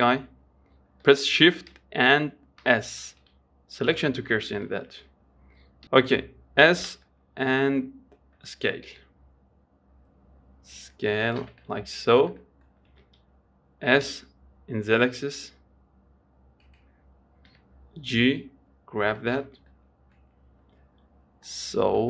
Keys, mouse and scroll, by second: 2.9 shift+s, 4.6-5.0 scroll up 3, 5.0-6.9 shift+middle drag, 6.9 s, 11.9 middle click, 12.3-12.7 scroll down 3, 12.7 middle click, 13.2 s, 17.8 g, 20.0 middle click, 20.7-21.8 scroll up 1, 21.8 middle click.